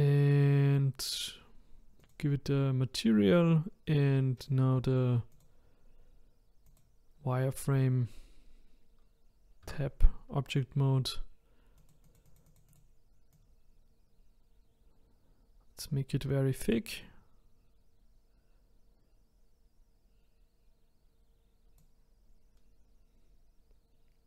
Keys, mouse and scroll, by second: 1.0-4.0 drag, 4.4 click, 5.3-8.4 drag, 9.6 Tab, 11.8-16.4 drag.